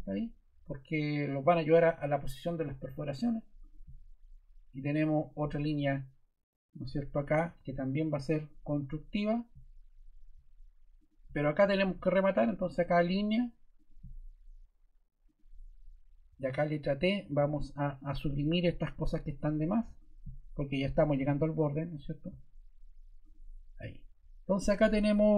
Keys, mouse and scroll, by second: 17.2 t.